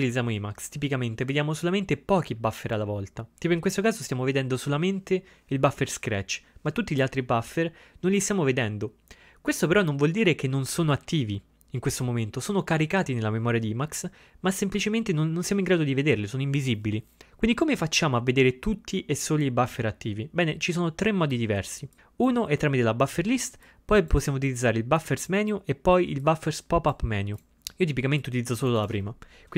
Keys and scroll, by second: 6.2-6.9 typing.